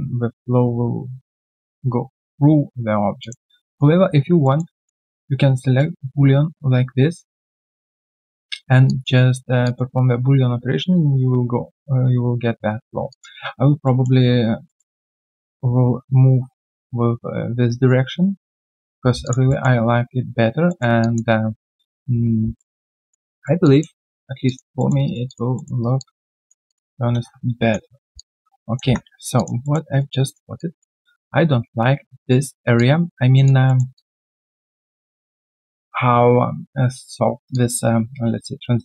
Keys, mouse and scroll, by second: 3.2 alt+click, 3.4 alt+right click, 3.7 alt+click, 4.4 alt+middle click, 4.7 alt+click, 5.2 right click, 8.8 alt+click, 13.1 alt+click, 13.8 alt+middle click, 14.6 alt+middle click, 18.5 right click, 18.9 q, 19.2 alt+click, 19.5 alt+middle click, 20.7 alt+middle click, 21.0 alt+click, 22.5 alt+middle click, 22.9 alt+click, 23.3 alt+middle click, 23.6 alt+click, 24.1 alt+scroll down 1, 24.4 alt+click, 24.7 alt+middle click, 25.0 alt+right click, 25.2 alt+click, 25.5 alt+middle click, 25.8 alt+right click, 25.9 alt+click, 28.1 3, 28.1 alt+click, 28.8 alt+1, 28.8 click, 29.1 alt+right click, 29.3 alt+click, 29.6 alt+middle click, 29.9 alt+right click, 30.1 alt+click, 32.6 alt+click, 33.6 alt+middle click, 33.9 alt+click, 34.6 right click, 34.8 alt+click, 37.5 alt+click.